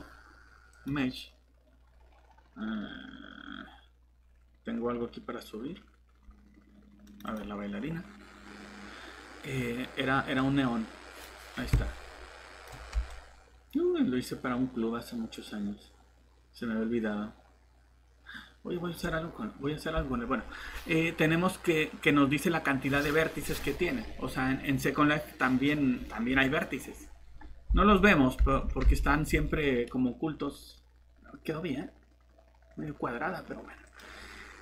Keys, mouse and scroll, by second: 3.6 scroll down 1, 7.0 click, 11.2-13.4 typing, 20.1 scroll up 1, 27.9 alt+Tab, 28.6 alt+Tab, 29.3 Escape, 33.9 click.